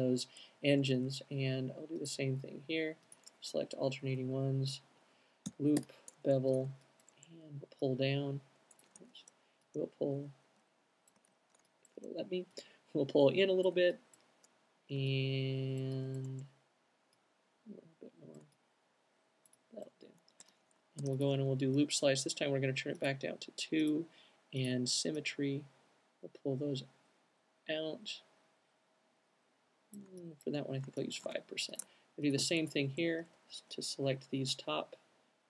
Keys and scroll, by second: 3.9 fn+Up, 4.5 Up, 4.8 Up, 5.5 l, 5.9 b, 20.5 alt+q, 21.0 alt+q, 30.8 alt+shift+q, 33.3 fn+Up, 33.5 alt+shift+fn+q, 34.2 alt+shift+fn+q.